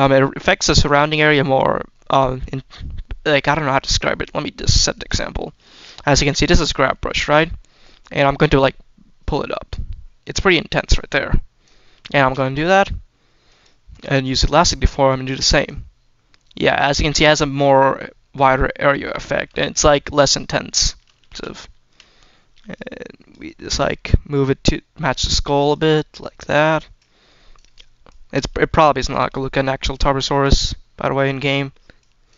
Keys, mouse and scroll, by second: 4.8 click, 5.2 shift+middle click, 5.7 shift+middle click, 6.9 shift+middle click, 7.6 scroll down 1, 8.3-11.6 drag, 12.1 ctrl+z, 13.3 click, 15.5-16.6 drag, 19.6 shift+middle click, 20.1 shift+middle click, 20.7 shift+middle click, 21.2 ctrl+z, 21.6 shift+middle click, 22.7 click, 23.9 click, 25.6 click, 26.2 click, 26.8 click, 27.9 click, 29.1 shift+middle click, 29.6-30.3 scroll up 1, 30.3-31.4 drag, 31.8 click.